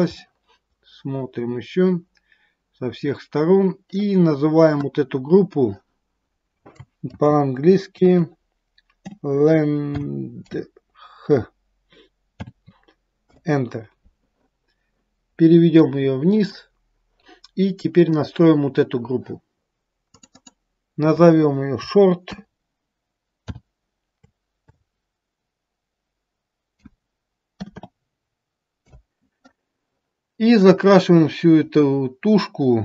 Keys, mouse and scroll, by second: 0.2 middle click, 6.2 click, 16.3 click, 18.2 click, 19.5 scroll up 1, 20.2 click, 20.3 click, 30.6 click.